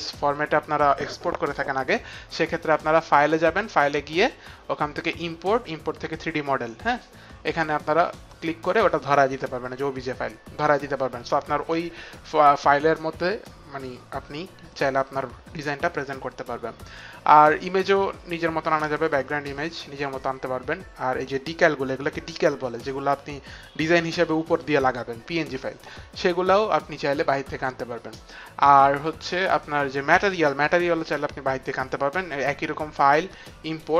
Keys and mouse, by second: 3.3 click, 8.0 click, 30.9 click, 32.3 click, 33.7 click.